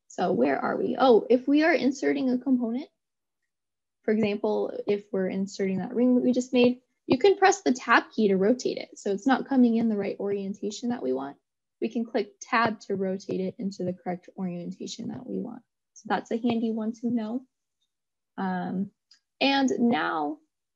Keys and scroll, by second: 7.9 Tab.